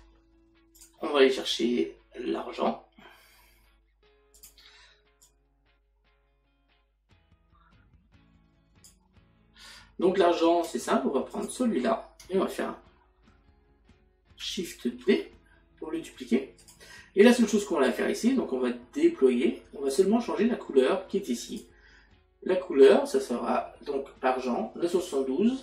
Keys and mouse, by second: 0.1 Delete, 0.8 click, 4.4 click, 11.3 click, 16.6 click.